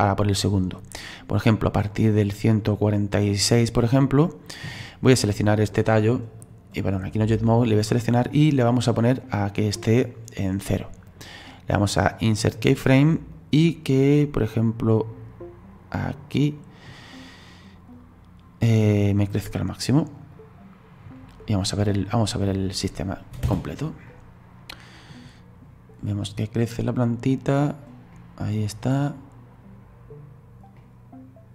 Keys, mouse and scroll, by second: 5.2 right click, 6.4-11.1 drag, 11.1-13.3 right drag, 13.3-16.4 drag, 17.9-20.0 drag, 20.0-21.8 right drag, 21.8 click, 22.4 right click, 23.4 space, 24.1-31.5 middle drag.